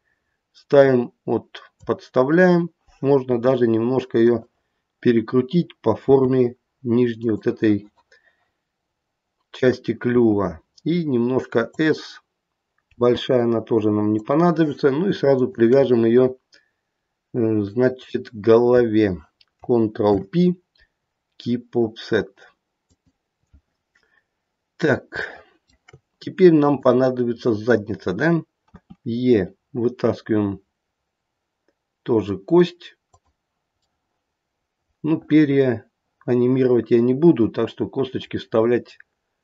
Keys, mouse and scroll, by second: 3.2 r, 6.0 g, 10.1 s, 12.9 g, 15.4 shift+click, 20.0 ctrl+p, 23.6 shift+middle click, 23.6-24.4 scroll down 2, 24.6-25.0 scroll down 1, 25.2 shift+middle click, 25.8 shift+middle click, 26.6 click, 28.7 e, 33.8 middle click.